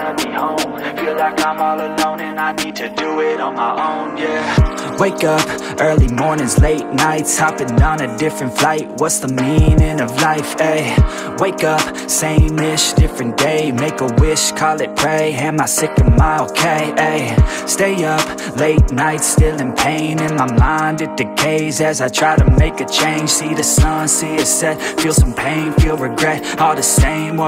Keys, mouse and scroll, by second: 1.8 g, 3.9-7.0 middle drag, 7.4 shift+a, 10.5 ctrl+alt+KP_0, 12.1 click, 13.1-16.3 drag, 16.4 drag, 16.7-17.3 scroll down 3, 17.3-19.1 drag, 19.8-22.5 drag, 23.2-26.6 drag, 27.3-27.4 middle drag.